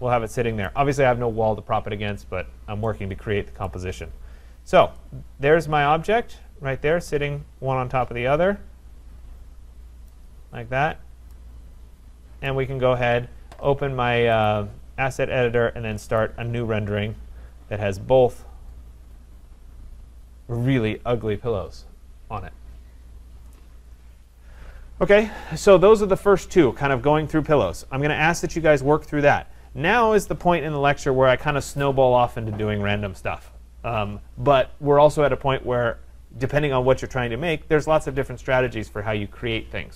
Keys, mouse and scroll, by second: 0.6 right click, 3.7 right click, 3.9-5.1 scroll, 10.1 right click, 10.7-11.6 scroll, 11.6 middle click, 12.5 right click, 14.5 click, 16.2 click.